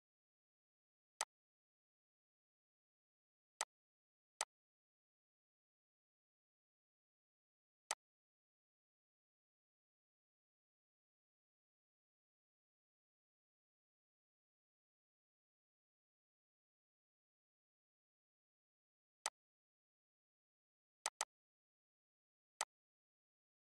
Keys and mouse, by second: 3.2 click, 7.5 click, 18.9 click, 18.9 click.